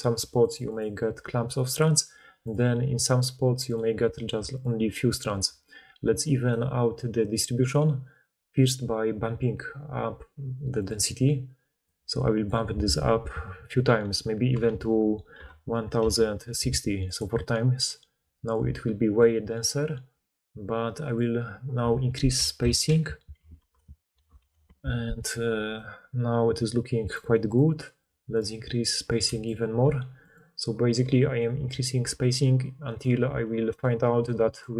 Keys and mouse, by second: 0.0-5.3 typing, 4.7-17.1 middle drag, 6.4 d, 17.1-21.1 drag, 21.1-30.3 middle drag, 30.3-34.7 right drag.